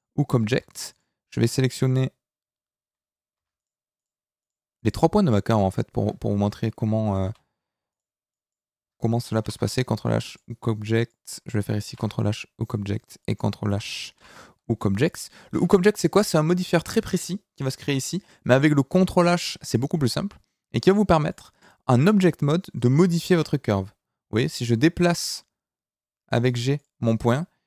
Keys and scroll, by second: 0.5 Tab, 7.2 a, 9.4 ctrl+h, 15.5 Tab, 23.3 g.